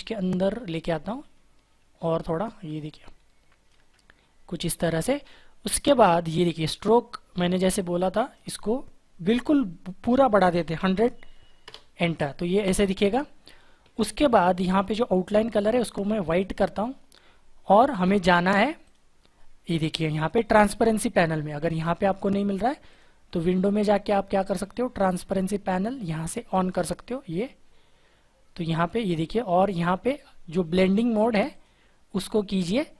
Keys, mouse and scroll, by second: 2.2 shift+click, 10.2-11.4 typing.